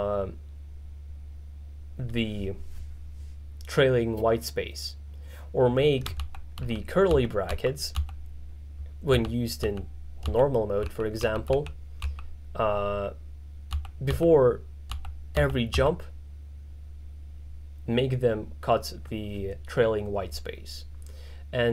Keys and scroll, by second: 6.3-8.0 typing, 9.2 shift+], 10.9 shift+[, 13.8 shift+].